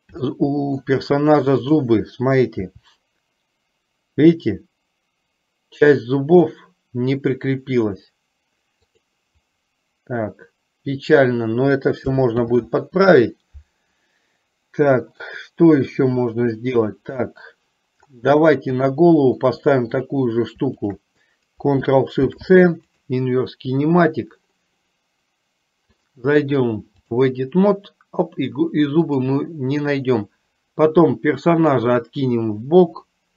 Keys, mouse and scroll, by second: 0.5 shift+middle click, 1.7 click, 2.7 r, 12.5 ctrl+z, 19.1-19.7 shift+middle drag, 20.0-20.5 drag, 20.9 shift+click, 26.1-27.4 drag, 29.2-32.0 drag.